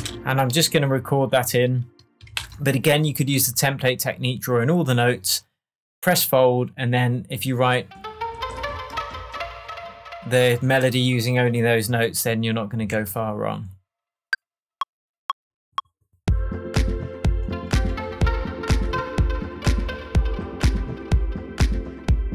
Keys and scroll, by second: 2.3 shift+super+m, 12.9 shift+Tab.